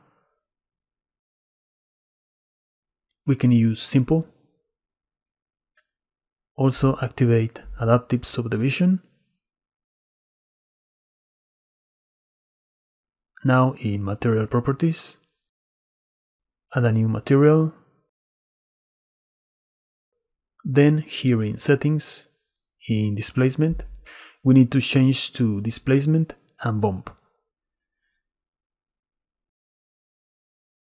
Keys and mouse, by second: 4.9 click, 9.0 click, 14.8 click, 17.7 click, 22.8 click, 26.7-29.5 drag.